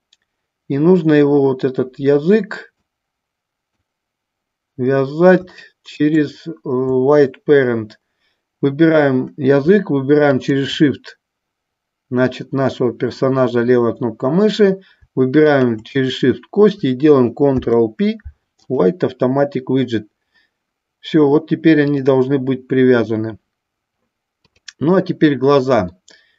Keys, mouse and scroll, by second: 2.9 click, 5.6 shift+middle click, 10.4 shift+click, 15.7 shift+click, 17.7 ctrl+p, 26.0 middle click.